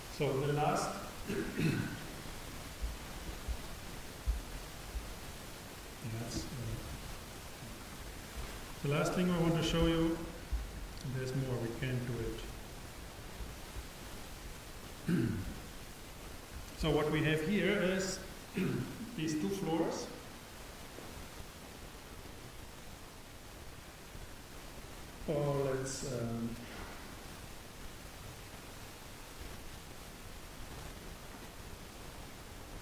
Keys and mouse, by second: 14.9-16.8 drag.